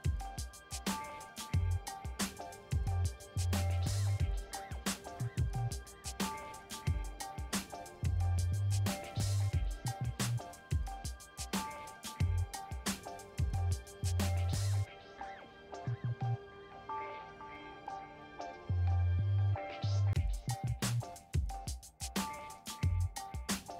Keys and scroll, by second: 4.1 9, 5.5 d, 7.8 2, 8.2 a, 9.8 0, 10.1 1, 23.2 a, 23.6 1.